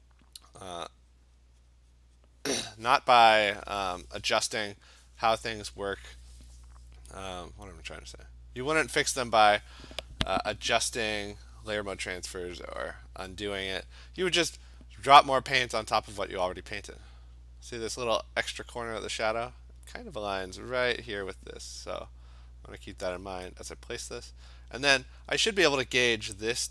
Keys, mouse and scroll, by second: 0.1 click, 0.6 click, 1.0 click, 2.5 click, 2.8 click, 6.4 click, 8.8 click, 13.3 click, 13.7 click, 14.1 click, 15.1 click, 15.9 click, 16.1 click, 18.8 click, 21.6 click, 22.8 click, 23.3 click, 23.8 click, 24.1 click, 24.6 click, 24.8 click.